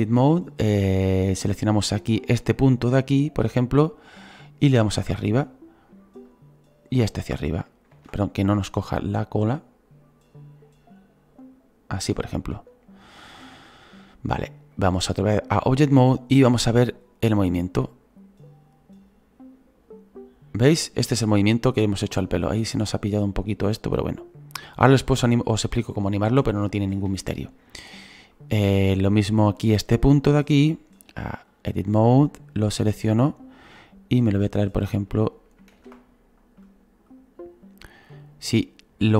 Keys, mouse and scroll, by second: 0.0-2.8 drag, 1.9 scroll up 5, 2.8 right click, 3.7-6.2 drag, 6.2 right click, 6.9-7.9 drag, 7.9 ctrl+z, 8.5-12.1 drag, 15.3-20.9 drag, 16.4 scroll up 2, 23.9-26.0 drag, 26.0-30.0 shift+middle drag, 30.0-31.7 right drag, 31.7-33.1 drag, 33.1 right click, 33.9-35.7 drag, 35.7 ctrl+z, 37.6-39.1 drag.